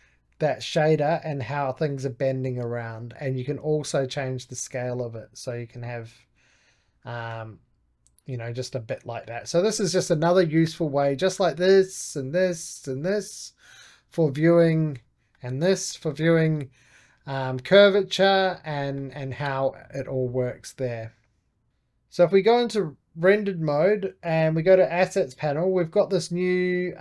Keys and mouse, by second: 1.8 click, 2.0-3.3 middle drag, 3.3-5.8 drag, 7.2-9.5 middle drag, 9.5 click, 9.9-11.2 middle drag, 11.2-15.2 drag, 15.2-16.2 middle drag, 16.2 click, 17.2 middle click, 18.1 click, 18.7-19.7 middle drag, 19.7-22.4 drag, 23.1-27.0 drag.